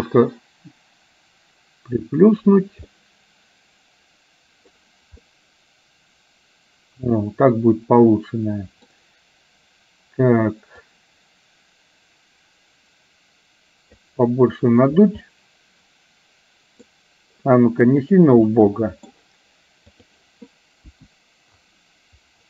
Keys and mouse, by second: 0.1 click, 0.3-2.7 drag, 3.1-4.8 middle drag, 5.3-8.9 middle drag, 10.8-14.1 drag, 15.3-16.9 middle drag, 18.6 middle click, 19.9 click, 20.9 KP_1.